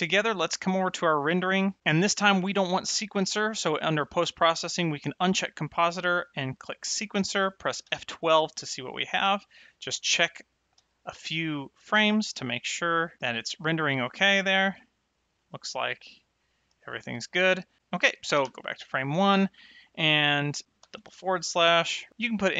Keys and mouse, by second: 0.9 click, 5.1 click, 6.3 click, 7.8 F12, 9.7 click, 10.7 F12, 12.0 click, 12.6 F12, 14.3 click, 14.7 F12, 16.2 click, 16.7 F12, 18.4 shift+Left, 20.7 /, 21.9 shift+r.